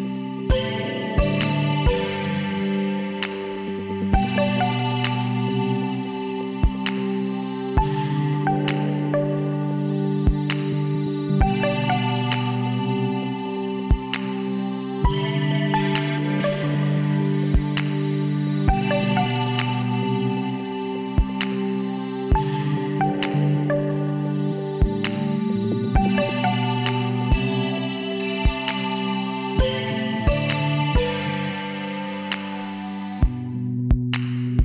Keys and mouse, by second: 1.2 e, 3.8 z, 5.1 z, 6.4 z, 7.1 z, 7.6 v, 9.8 b, 14.3 e, 16.6 s, 19.4-21.2 drag, 23.6 s, 27.0 z, 31.8 s.